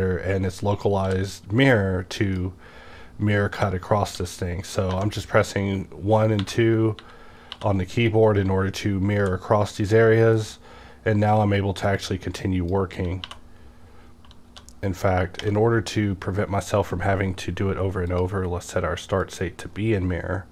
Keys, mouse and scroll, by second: 0.0-3.5 drag, 1.0 w, 3.5-5.0 typing, 6.4-8.0 typing, 9.2 w, 10.3 click, 12.0-14.5 drag, 13.2 2, 14.5 1, 15.5 -, 15.5 1, 18.1 click, 19.2-20.5 drag.